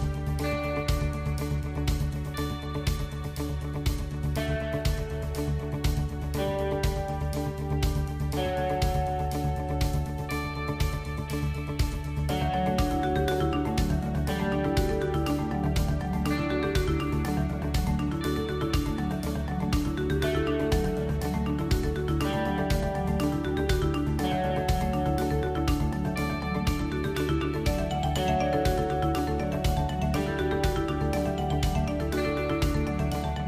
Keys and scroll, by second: 6.9 g, 13.8 g, 17.2 shift+a, 21.0 s, 22.8 s, 23.6 g, 27.3 g, 28.8 a, 29.3 Tab, 31.7 g.